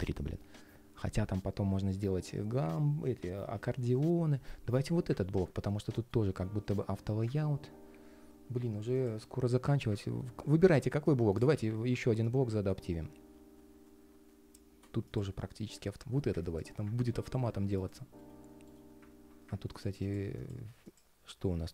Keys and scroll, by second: 5.4 ctrl+shift+3, 5.9 ctrl+shift+3, 16.7 super+z, 17.9 ctrl+shift+3, 18.4 ctrl+shift+3.